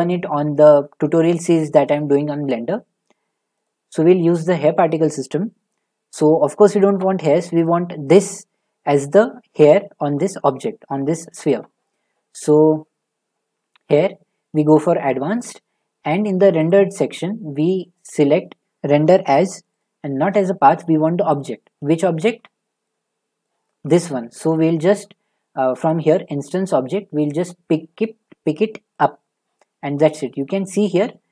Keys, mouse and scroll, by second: 6.3-7.6 scroll, 8.2 click, 9.9-11.3 scroll, 12.4 click, 14.8 click, 15.2 scroll, 15.7 middle click, 16.7 click, 16.7 middle click, 17.8 middle click, 17.9 middle click, 19.8 click, 21.3 click, 21.9 middle click, 22.0 middle click, 22.1-22.6 scroll, 23.4 shift+middle click, 24.9-26.4 scroll, 26.4 scroll, 27.4 click, 29.0 click, 29.7-30.3 scroll, 30.8 shift+middle click, 31.0-31.3 scroll.